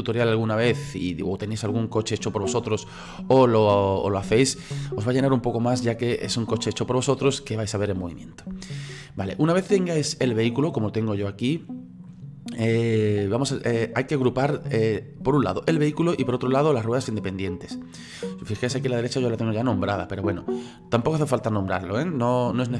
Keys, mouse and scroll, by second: 14.0 right click, 16.2 right click, 16.8 right click, 17.3-22.7 middle drag.